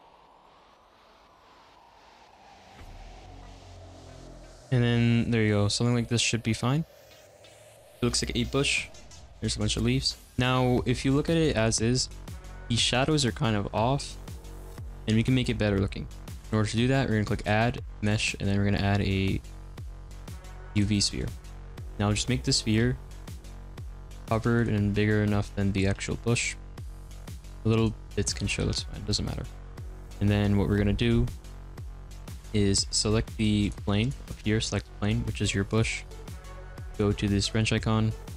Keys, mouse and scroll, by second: 0.0-3.9 typing, 0.0 middle click, 1.3 alt+middle click, 1.8 middle click, 2.0 middle click, 2.3 click, 2.4 middle click, 2.9 middle click, 2.9 ctrl+z, 3.1 middle click, 3.1 click, 3.6 middle click, 3.8 middle click, 4.0 middle click, 4.2 click, 4.2-7.0 middle drag, 10.3-20.8 shift+middle drag, 21.2-22.7 middle drag, 22.7 g, 23.4 s, 24.6 alt+middle click, 25.3 s, 26.0 alt+middle click, 26.8 g, 27.8 click, 28.4 x, 28.6 ctrl+z, 28.9 click, 29.1 g, 29.7 click, 32.9 click, 33.7 click, 34.2 click, 35.8 x, 36.0 ctrl+z.